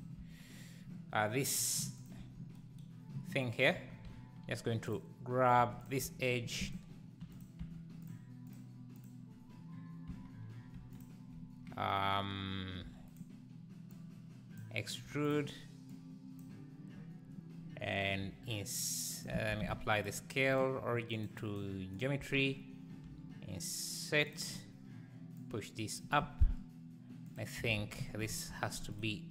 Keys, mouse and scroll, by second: 0.2 Tab, 2.1 click, 2.2 Tab, 4.9 click, 5.6 2, 5.8 click, 6.3 shift+d, 7.4 p, 7.6 Tab, 8.1 click, 8.5 click, 9.0 click, 10.1 Tab, 11.0 click, 12.8 e, 13.9 click, 15.0 3, 15.2 click, 15.9 click, 18.2 i, 19.3 Tab, 20.0 ctrl+a, 22.0 click, 22.2 Tab, 23.0 i, 25.5 click, 27.6 s.